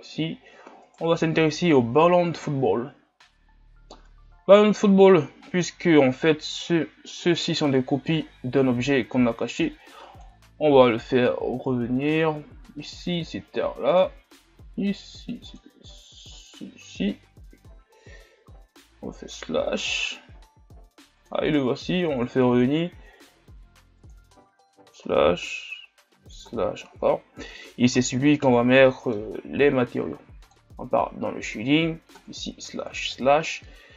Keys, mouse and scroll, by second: 0.1 scroll down 1, 0.9 right click, 1.6-2.0 scroll up 4, 15.6 click, 18.6 KP_Divide, 21.3 click, 22.2-24.1 drag, 25.1 KP_Divide, 26.5 KP_Divide, 27.3-28.0 scroll down 2, 28.0-30.6 middle drag, 30.6-33.9 drag.